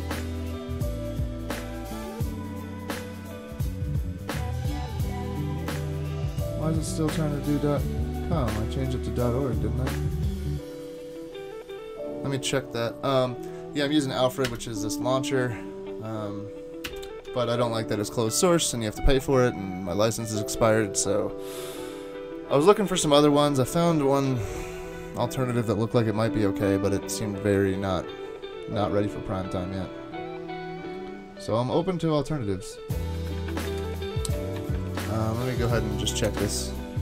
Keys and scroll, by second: 14.5 super+space, 16.9 super+space, 33.8 super+Tab, 34.9 shift+super+Tab, 36.2 alt+super+0.